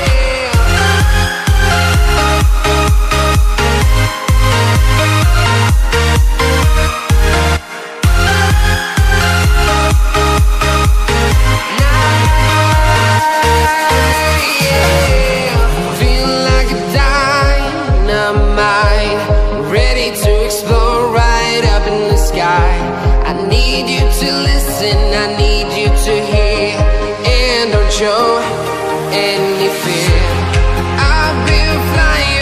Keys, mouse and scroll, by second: 2.2 Tab, 3.5 click, 5.2 Return, 6.0 right click, 13.1 click, 17.4 right click, 17.6 click, 19.1 ctrl+Num_Lock, 20.5 Return, 20.7 click, 21.5 click, 24.2 Return, 24.5 Up, 25.1 Right, 25.8 click, 31.8 KP_8, 32.1 click.